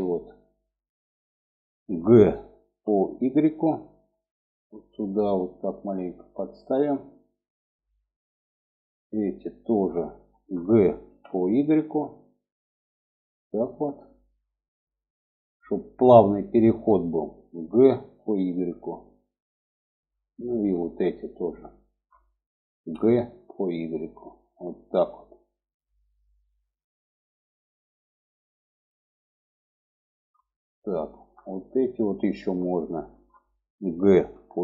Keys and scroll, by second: 2.0 g, 10.4 g, 17.0 g, 22.0 g, 33.5 g.